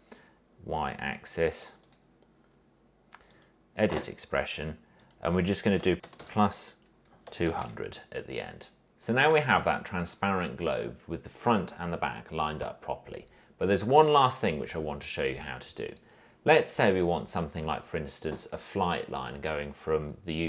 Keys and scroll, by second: 6.0 BackSpace, 6.4 shift+=, 7.4-8.3 typing.